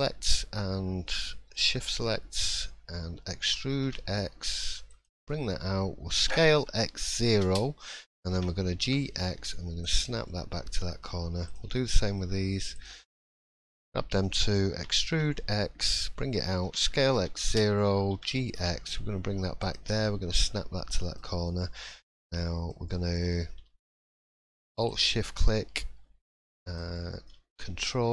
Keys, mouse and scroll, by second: 0.0 shift+click, 0.0-0.4 shift+scroll up 1, 1.1 shift+middle click, 3.4 e, 10.3 middle click, 11.4 click, 11.8 shift+middle click, 12.7 shift+click, 13.2 shift+middle click, 14.7 e, 20.0 middle click, 21.2-21.8 scroll up 1, 21.8-22.1 scroll up 2, 22.1 middle click, 22.9 shift+middle click, 24.8 alt+shift+click, 26.3 shift+middle click, 26.9 middle click.